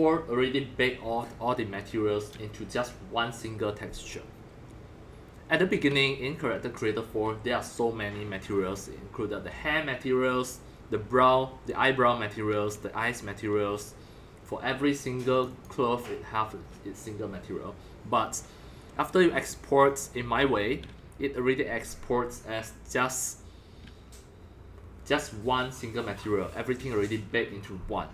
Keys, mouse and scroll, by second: 1.9 click, 5.6 click, 15.3 click, 15.4 click, 19.3 click, 19.8 click, 20.0-25.1 drag.